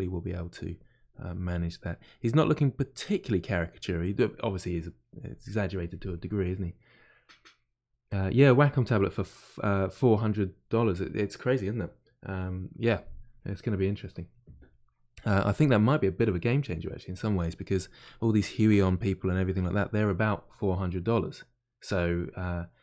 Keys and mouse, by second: 0.0-1.5 drag, 1.5-19.2 middle drag, 19.2-22.8 drag.